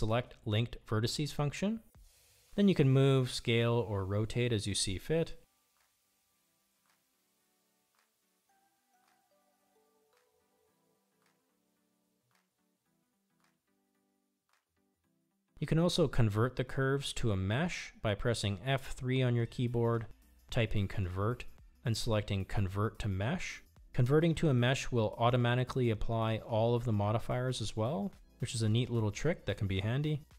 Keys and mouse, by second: 0.7 l, 5.1 middle click, 5.6 ctrl+z, 5.6 r, 15.4-16.7 middle drag, 17.6 F3.